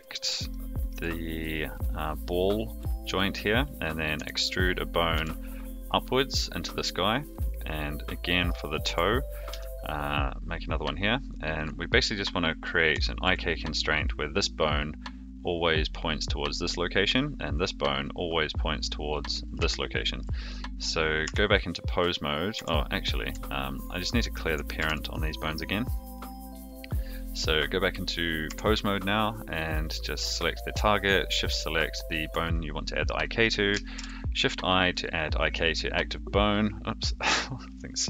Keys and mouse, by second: 0.5 shift+middle click, 4.1 e, 8.3 click, 8.8 e, 13.0 shift+middle click, 13.9 click, 16.5 click, 19.1 click, 19.7 shift+middle click, 21.2 Tab, 22.5 Tab, 23.7 shift+click, 24.7 alt+p, 28.4 Tab, 29.7 click, 31.2 shift+click, 33.9 shift+i.